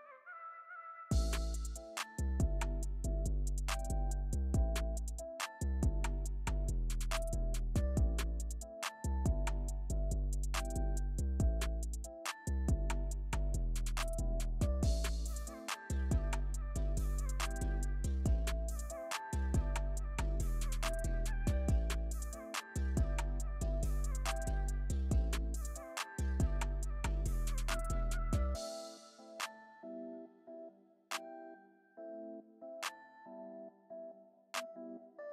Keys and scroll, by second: 1.4 alt+super+z.